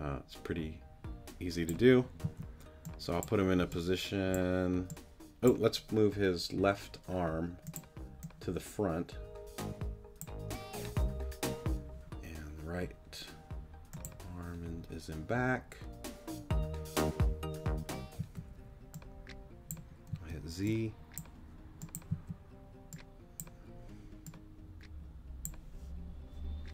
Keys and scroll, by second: 2.2 z, 18.2 z, 20.1 z, 22.1 z.